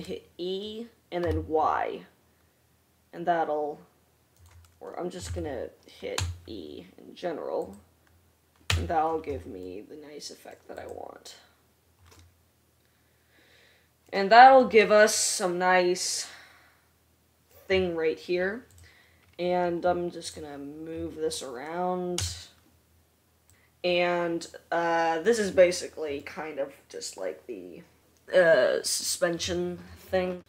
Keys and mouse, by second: 0.2 e, 2.9-8.4 drag, 5.9 ctrl+z, 8.2 e, 9.2 Tab, 11.1 click, 11.5-30.4 middle drag, 22.7 r.